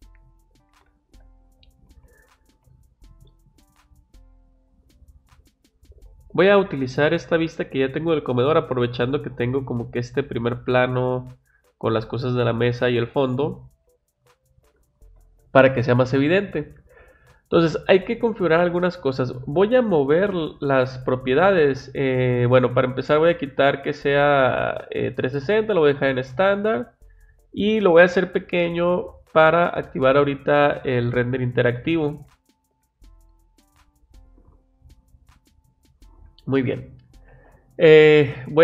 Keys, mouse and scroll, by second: 13.7 click, 16.1 click, 19.4-20.7 drag, 20.8 click, 21.8 click, 23.1 click, 25.3 click, 26.9 click, 32.1 click, 35.2 click, 36.6 click.